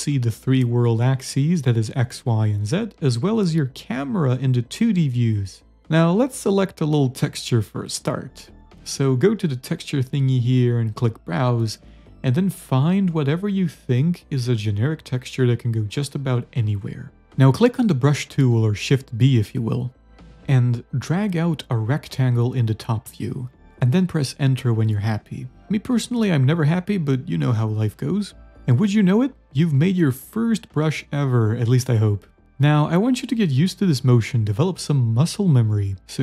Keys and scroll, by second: 0.1 d, 1.1 z, 9.6-10.7 typing, 25.8 Return, 26.5 z, 26.9 a, 28.2 z, 29.1 shift+s, 32.8-33.6 typing, 35.0 shift+s.